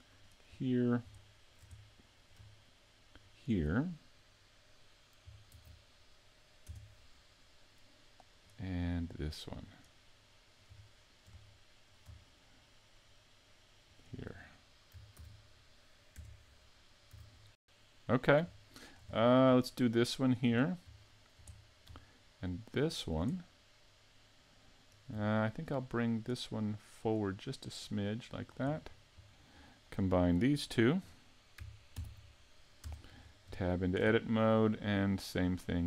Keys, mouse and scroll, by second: 0.1 right click, 0.6 middle click, 1.3 shift+middle click, 1.8 middle click, 3.2 shift+right click, 5.5 ctrl+e, 8.3 right click, 9.2 right click, 9.7 right click, 10.1 middle click, 10.9 shift+middle click, 11.5 middle click, 13.9 shift+right click, 15.2 ctrl+e, 17.6 a, 17.8 middle click, 18.6 shift+middle click, 19.1-20.2 scroll up 8, 20.2 right click, 20.2 scroll up 1, 20.5-21.9 scroll down 5, 21.0 shift+middle click, 22.9 shift+right click, 23.4 middle click, 25.4 shift+middle click, 26.1 right click, 27.0 right click, 27.8 click, 28.7 scroll down 1, 30.6 shift+right click, 32.1 ctrl+j, 32.8 Tab, 33.2-33.6 scroll up 3, 33.6 shift+middle click, 34.1 middle click, 35.4 right click.